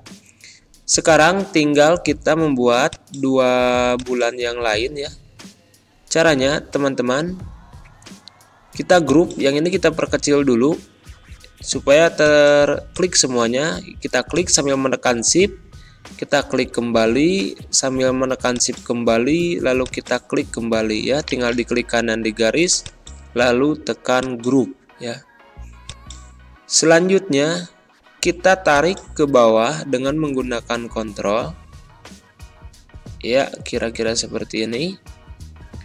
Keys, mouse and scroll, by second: 18.4 click, 18.6 shift+Num_Lock, 18.6 shift+click, 21.2 right click, 22.7 click, 28.6 click, 28.7 ctrl+click.